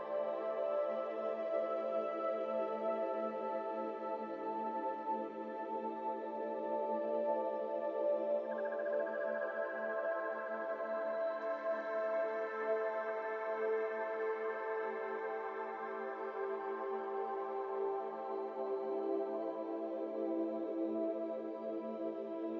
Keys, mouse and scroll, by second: 1.2 KP_1, 3.3-4.0 drag, 4.5-6.9 drag, 6.9-8.1 shift+middle drag, 8.1 scroll up 1, 8.2 middle click, 8.4 Tab, 8.5 scroll down 2, 8.6-9.3 middle drag, 9.3 scroll up 2, 9.5 Tab, 10.3 KP_1, 12.3 scroll down 1, 12.4 middle click, 12.6 scroll up 2, 12.9 3, 13.0 click, 13.7 i, 14.6 Tab, 14.8 scroll down 2, 14.9 middle click, 15.5 ctrl+1, 15.8 middle click, 15.9 scroll up 2, 16.1 Tab, 16.4 middle click, 16.6 scroll down 1, 16.7 middle click, 17.0 alt+z, 17.3 click, 17.6 x, 18.6 1, 18.9 click, 19.6 x, 20.7 middle click, 21.1 alt+z, 21.4 3, 21.6 click, 21.9 middle click, 22.1-22.5 scroll up 2.